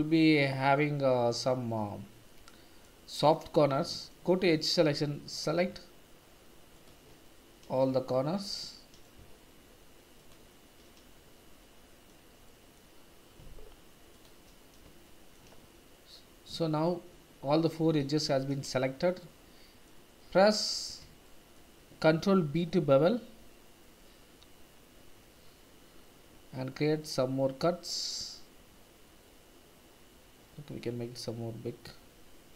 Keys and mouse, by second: 0.4 middle click, 2.3 middle click, 3.8 2, 6.7 click, 7.2 middle click, 8.6 middle click, 11.6 middle click, 12.4 middle click, 15.1 shift+middle click, 15.6 middle click, 16.8 middle click, 18.4 shift+z, 19.2 middle click, 21.2 shift+middle click, 22.5 ctrl+b.